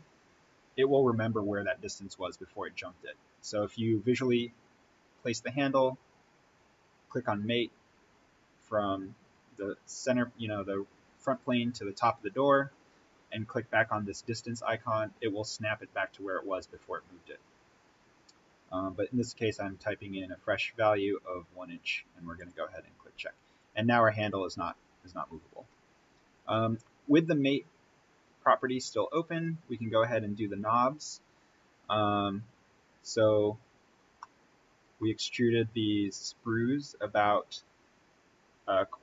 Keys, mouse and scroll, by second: 7.9-8.5 scroll down 1, 21.4-21.7 scroll up 1, 25.3-27.7 scroll up 1, 29.2-29.6 scroll down 1, 34.2 middle click, 34.9-35.3 scroll down 1.